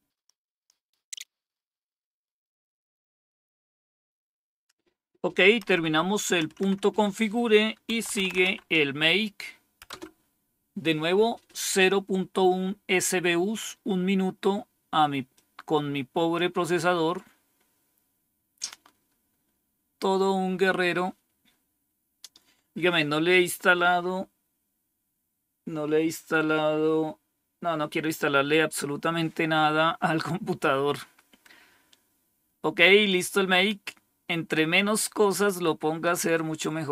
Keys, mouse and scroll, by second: 5.5 Up, 6.3 Down, 7.6-8.8 typing, 9.7 Return, 13.5-14.9 scroll down 1, 15.2-16.3 drag, 19.6-20.3 scroll down 2, 32.9-34.4 drag, 35.0 right click, 35.9 click, 36.5 click.